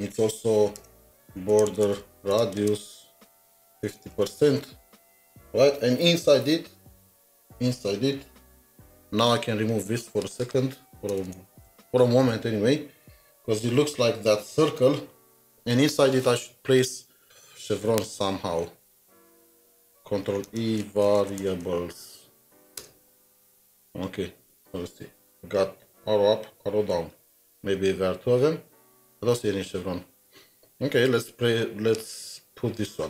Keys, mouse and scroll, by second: 0.8-4.8 typing, 0.9 Return, 10.1-11.4 typing, 10.4 double click, 11.6 ctrl+s, 20.5 ctrl+e, 20.6-21.9 typing, 22.8 Return, 27.5 Return, 27.6 scroll down 1, 28.6-29.1 scroll down 2, 29.6 scroll down 1, 30.3 scroll down 1, 30.4 scroll up 3, 31.0 scroll up 1.